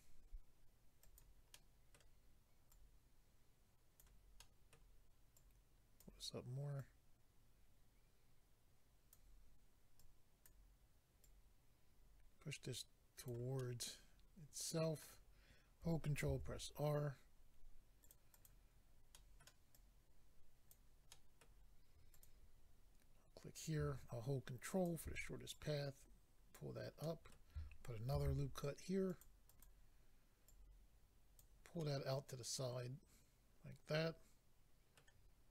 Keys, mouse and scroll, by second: 1.0 click, 1.1 click, 1.5 middle click, 2.7 click, 4.4 middle click, 5.4 middle click, 6.0 click, 6.8 click, 10.0 click, 13.6 middle click, 16.3 ctrl+r, 17.4 scroll up 1, 18.1 click, 18.3 click, 18.4 double click, 18.7 scroll up 1, 19.1 middle click, 19.7 double click, 21.4 middle click, 22.1 click, 24.7 ctrl+click, 25.5 click, 27.0 middle click, 28.1 ctrl+r, 29.1 click, 29.2 click, 29.5 click, 29.6 double click, 30.4 double click, 31.8 middle click.